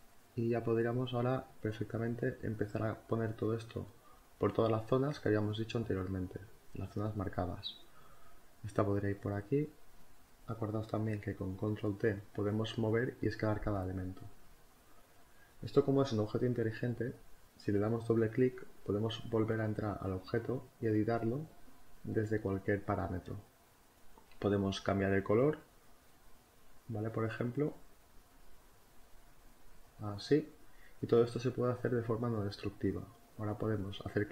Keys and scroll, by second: 8.6 Return, 9.4 v, 9.6 Left, 9.9 Down, 10.5 Up.